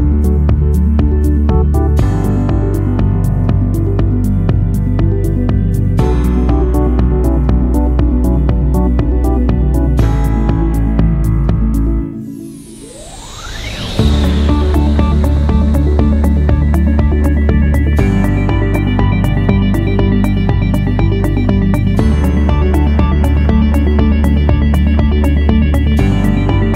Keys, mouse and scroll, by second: 0.8 1, 2.8 0, 3.1 Return, 11.5 4, 12.0 Return, 20.8 6, 21.2 0, 21.5 Return, 24.1 click, 25.2 click.